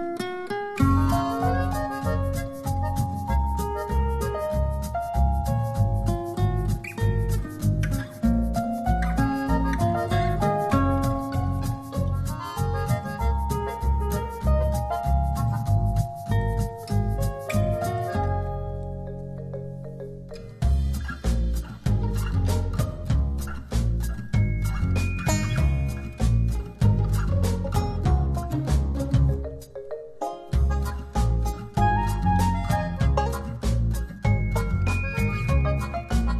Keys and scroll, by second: 17.7 p, 18.4 shift+p, 18.9 shift+r, 35.2 -, 35.5 5.